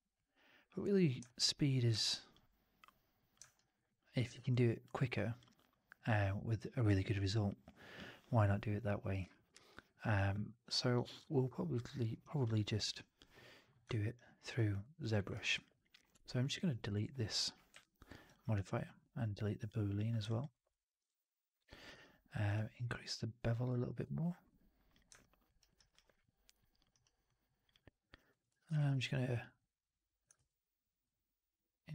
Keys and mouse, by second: 1.2 alt+right click, 1.3 alt+click, 1.8 w, 3.4 alt+right drag, 3.8 alt+drag, 4.2 alt+right drag, 4.4-4.7 alt+drag, 4.9 alt+middle drag, 5.3-5.9 alt+drag, 14.0-14.4 alt+drag, 14.7 alt+click, 15.1 alt+middle click, 15.2 alt+right drag, 15.4 alt+drag, 17.6 Delete, 20.4 alt+right drag, 20.6-21.6 alt+drag, 21.8 q, 25.1 alt+drag, 25.5 alt+right drag, 25.7 alt+right drag, 25.8-26.7 alt+drag, 26.8 alt+right drag, 27.2-27.5 alt+drag, 27.6-28.1 alt+drag, 28.2 1, 28.5 alt+shift+click, 28.6 shift+x, 30.3 shift+x.